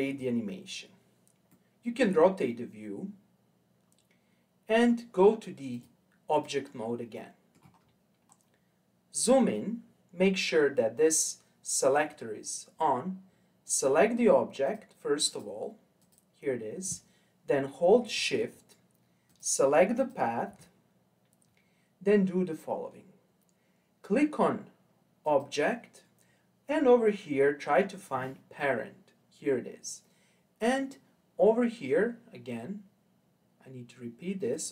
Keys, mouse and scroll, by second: 1.5-4.5 middle drag, 5.7-7.1 drag, 7.1 middle click, 7.8-8.3 scroll up 5, 8.3 scroll down 1, 8.5-11.6 scroll up 2, 13.6 click, 14.6 click, 15.3 click, 16.0 click, 19.3 shift+click, 19.9 shift+click, 25.2-28.4 drag, 34.5-34.7 drag.